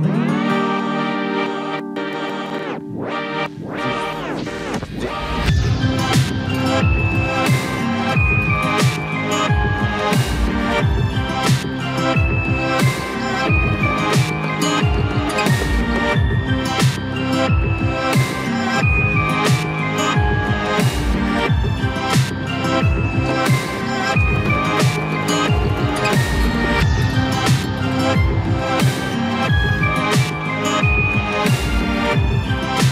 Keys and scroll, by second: 2.3 ctrl+g, 25.0 ctrl+g.